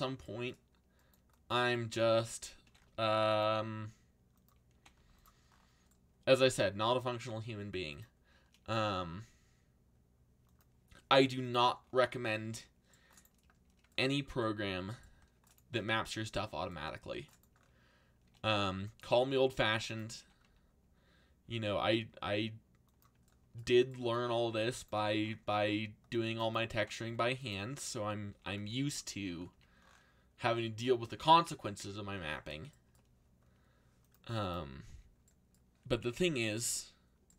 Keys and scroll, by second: 2.4-3.3 typing, 4.4-5.4 typing, 12.4 c, 14.2 c, 16.1 c, 18.0-20.9 typing, 24.9 c, 26.7 g, 27.0 x, 28.3 g, 28.5 x, 29.5 a, 34.8 z.